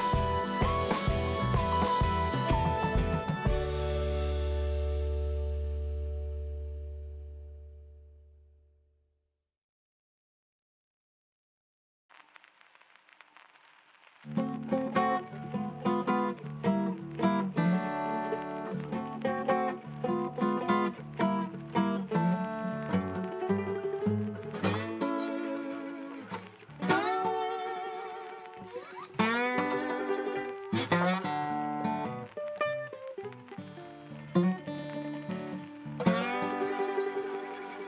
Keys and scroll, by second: 1.9 Right, 2.0 BackSpace, 2.3 2, 2.5 Return, 13.0 BackSpace, 13.3 3, 13.7 Return, 24.1-25.0 typing, 28.4 c.